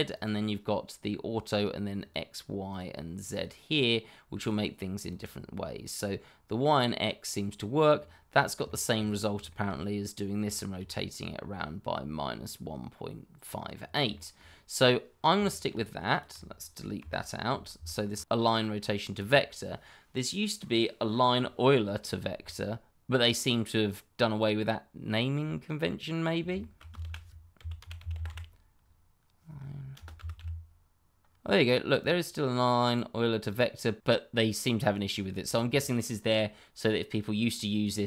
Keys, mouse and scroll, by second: 5.9-6.5 scroll up 1, 6.5 middle click, 7.9-8.3 scroll down 1, 8.6 shift+middle click, 9.5 middle click, 10.5 shift+middle click, 10.6 middle click, 10.8-12.2 scroll up 1, 13.7-14.0 scroll down 1, 14.4 shift+middle click, 15.1 scroll down 1, 15.4 shift+middle click, 16.1 click, 16.9 Delete, 17.4 scroll up 1, 17.8 shift+middle click, 18.2-19.4 scroll up 1, 25.3-26.4 scroll down 1, 26.5 shift+middle click, 26.6 middle click, 27.0-28.2 typing, 29.9 space, 30.1 e, 30.3 u, 31.9 click, 34.7 click.